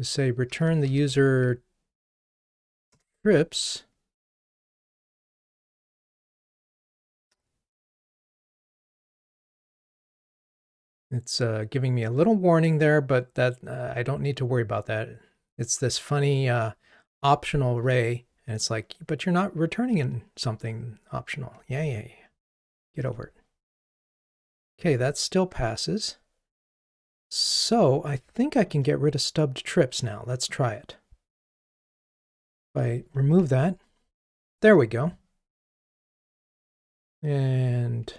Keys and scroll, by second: 2.9 Return, 22.5 ctrl+r, 28.8 super+b, 32.6 Delete, 33.3 super+BackSpace, 36.3 super+b.